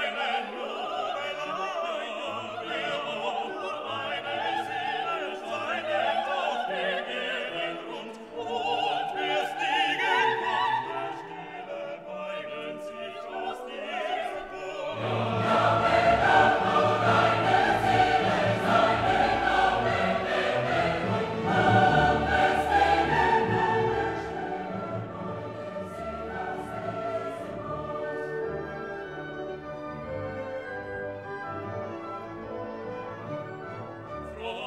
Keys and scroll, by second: 4.7 ctrl+t.